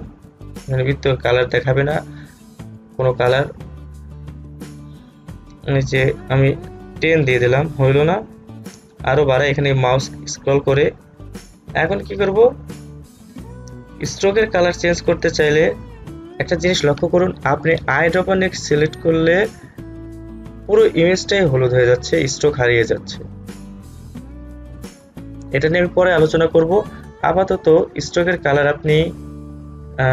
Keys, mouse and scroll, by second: 0.6 click, 3.0 click, 9.4-10.9 scroll up 1, 14.0 scroll down 1, 15.0 click, 20.8 click, 24.6 ctrl+z, 28.3-30.1 drag.